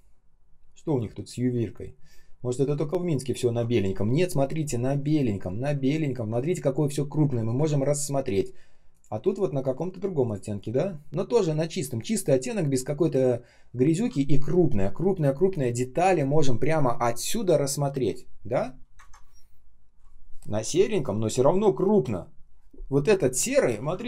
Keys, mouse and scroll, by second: 7.5 ctrl+ц, 18.9 ctrl+ц.